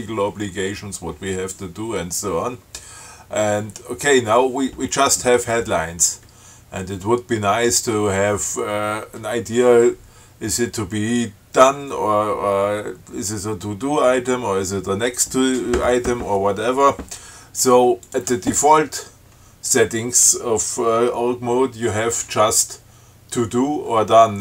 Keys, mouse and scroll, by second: 18.3 click.